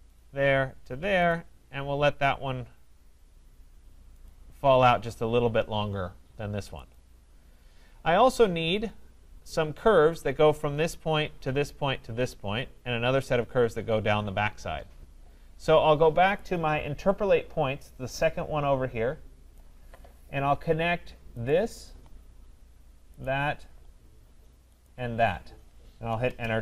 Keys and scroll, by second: 26.2 Return.